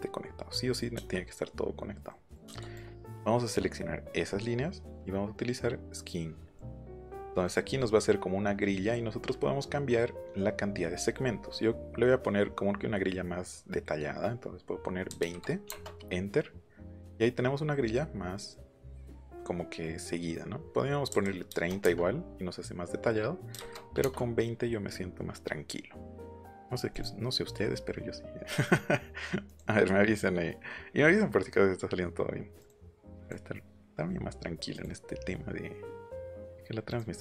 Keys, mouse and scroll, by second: 0.9 shift+middle click, 2.0 middle click, 2.7 click, 6.5 click, 7.3 middle click, 7.7 middle click, 15.1 KP_2, 15.2 KP_0, 15.6 KP_Enter, 17.0 middle click, 18.3 middle click, 21.1 KP_3, 21.4 KP_0, 21.8 KP_Enter, 23.5 KP_2, 23.6 KP_0, 24.0 KP_Enter, 26.1 click, 26.9 click, 29.4 click, 32.5 click, 33.1 click, 34.7 click, 36.0 click, 36.8 click.